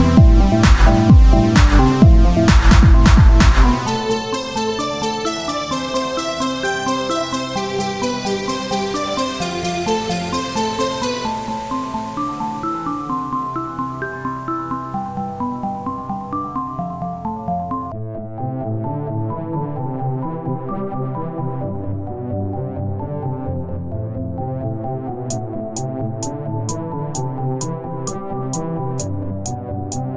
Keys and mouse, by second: 1.3 r, 2.0 s, 2.7 z, 3.8 s, 10.7 KP_1, 16.3 shift+d, 21.3 x, 22.6 click, 23.6 KP_1, 26.6 s.